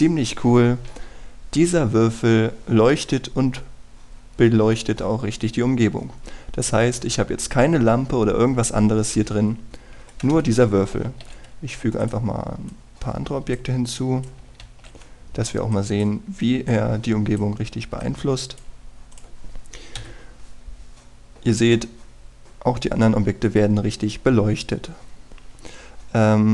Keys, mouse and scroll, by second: 11.0 Escape, 12.1 shift+a, 13.0 click, 15.7 shift+a, 16.7 click, 21.0 F12, 26.0-26.5 scroll up 1.